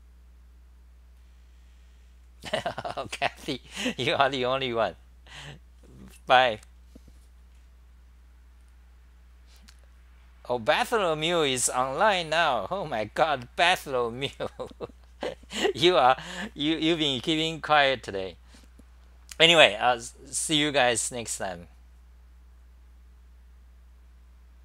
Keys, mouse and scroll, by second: 7.0-10.9 scroll down 12.